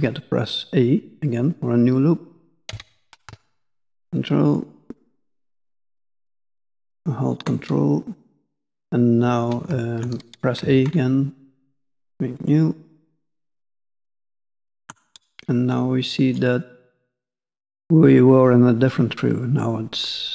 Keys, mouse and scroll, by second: 5.8-7.6 ctrl+scroll up 1, 15.1 middle click, 16.8 scroll down 1, 16.8 middle click.